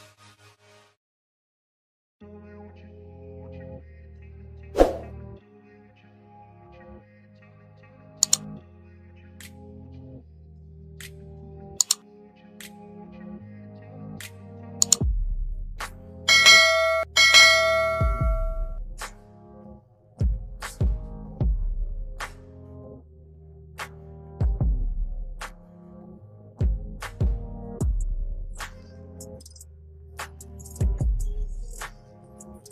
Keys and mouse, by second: 1.6 click, 5.5 click, 7.3 click, 9.8 click, 11.3 click, 14.5 click, 16.9 click, 18.1 click, 19.5 KP_7, 20.1 KP_Enter, 22.1 click, 22.9 KP_1, 23.2 KP_0, 23.6 KP_Enter, 25.3 click, 30.9 Up, 31.3 Up, 31.5 Up, 31.7 Up, 31.9 Up, 32.1 Up, 32.3 Up.